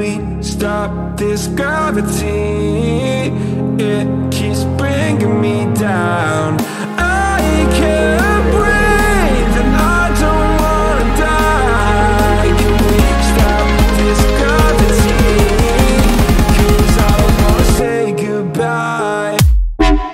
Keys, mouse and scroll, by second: 0.0-1.3 drag, 3.0 click, 3.8 click, 5.4 click, 6.3 click, 7.3 g, 10.0-12.5 drag, 13.3 click, 14.4 g, 17.6-20.1 drag.